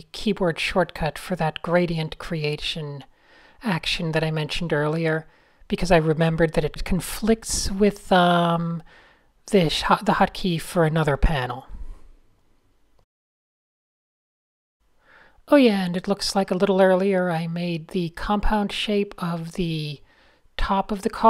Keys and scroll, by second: 5.1 alt+super+l, 5.2 typing, 6.5 p, 12.2-13.3 typing, 15.6-17.6 typing, 20.2 shift+super+a, 20.4 m, 21.1 e.